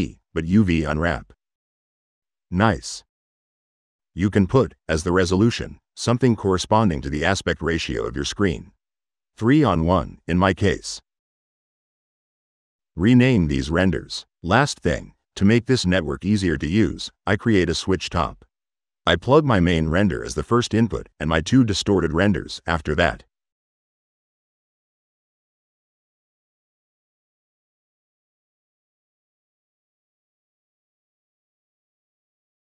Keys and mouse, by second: 0.6 click, 1.8 click, 3.4 click, 5.3 drag, 7.4 click, 10.7-12.9 middle drag, 13.4 click, 14.1 click, 15.2 click, 15.6 Tab, 16.3 s, 16.6 w, 17.5 drag, 18.5 drag, 20.0-21.0 drag, 22.3-23.1 drag, 24.0-25.2 drag, 25.8 click, 26.7-27.5 drag, 27.9 click, 29.2 middle click, 31.0-32.0 drag.